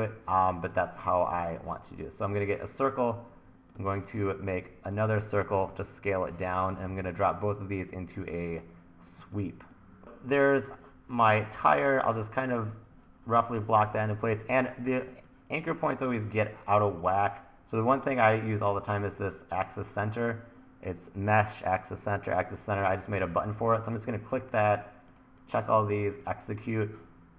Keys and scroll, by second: 5.4 t, 11.8 t, 12.7 super+z, 15.1 1, 16.0 1.